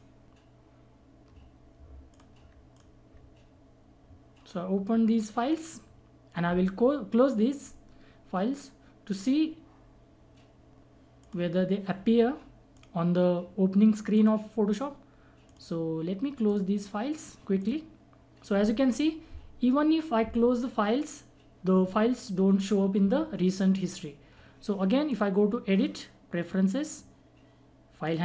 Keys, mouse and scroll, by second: 2.1 ctrl+click, 2.7 click, 11.2 click, 25.1 click, 28.0 click.